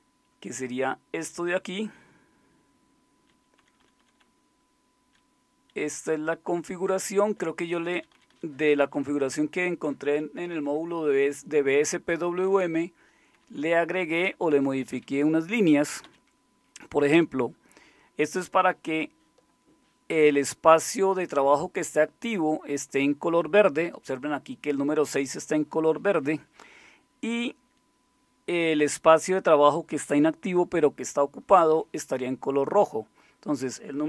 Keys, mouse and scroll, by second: 1.7-3.2 Down, 3.8-5.1 Down, 5.8-7.3 Up, 7.7 Down, 7.9 Down, 8.1 Down, 8.3 Down, 8.8 typing, 13.3 Down, 13.5-15.6 typing, 16.0 Up, 17.1 Down.